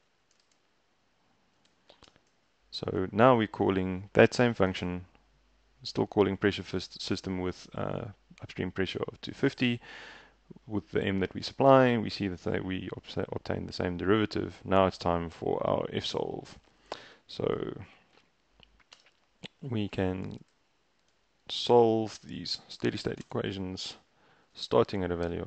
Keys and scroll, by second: 0.0-2.1 typing, 16.0 Escape, 16.7 x, 18.2-25.4 typing, 19.0 Return, 19.8 ctrl+e.